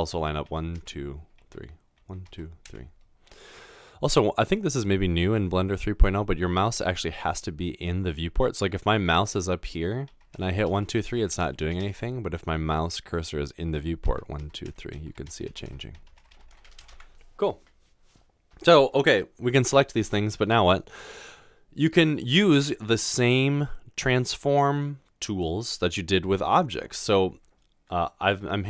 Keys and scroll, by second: 0.7-2.6 typing, 10.2-11.8 typing, 13.8-17.2 typing, 19.8 typing.